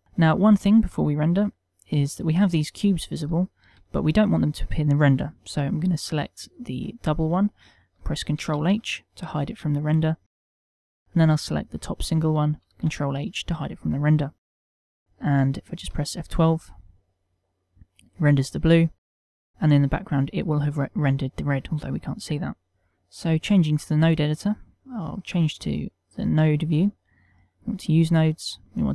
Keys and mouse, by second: 2.1 middle click, 2.9 ctrl+middle click, 3.6 click, 3.9 shift+middle click, 9.1 ctrl+h, 13.2 ctrl+h, 16.8 F12, 22.8 click.